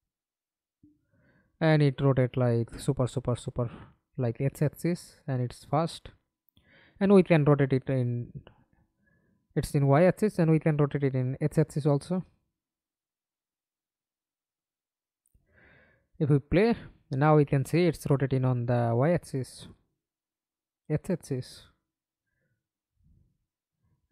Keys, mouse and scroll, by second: 0.1 alt+p, 1.1-2.4 typing, 4.7 d, 5.1 Escape, 5.5 middle click, 6.3 F11, 11.8 alt+click, 13.3 double click, 13.8 double click, 14.1 middle click, 14.9 F11, 15.4 alt+p, 18.6 Escape, 19.0 middle click, 19.6 middle click, 19.8 F11.